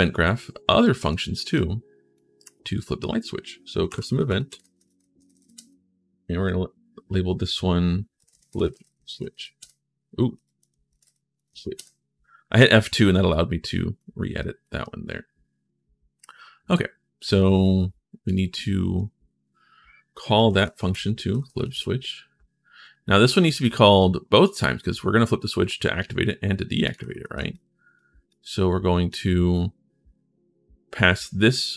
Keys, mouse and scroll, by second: 0.6 right click, 1.3 right click, 2.1 right click, 3.4-5.2 typing, 8.3-9.5 typing, 11.1 c, 13.1 right click, 14.1 right click, 14.6-17.1 right drag, 18.0 right click, 20.1-21.7 typing, 23.0 click, 23.4 click, 26.6 click, 27.0 ctrl+v, 27.3 click, 28.1 click, 31.5-31.7 drag.